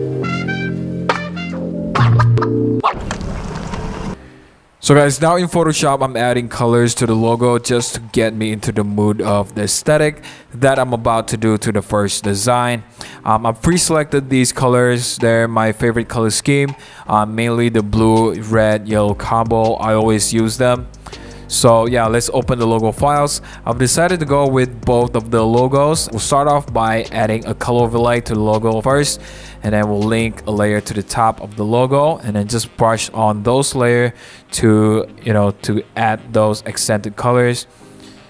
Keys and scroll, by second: 0.0-0.7 typing, 0.2 super+=, 21.5-22.6 typing, 23.2 super+t, 23.7 Return, 24.2 super+g, 24.5-24.9 typing, 26.6 super+a, 26.8 super+c, 26.8 super+d, 32.0 typing, 33.4 alt+super+e, 33.8-36.7 typing, 33.9 super+1, 34.2 super+t, 34.3 super+Return, 34.5 super+=, 34.6 super+t, 36.2 super+BackSpace, 36.3 super+z, 36.6 super+d, 36.7 super+0, 36.9 super+=.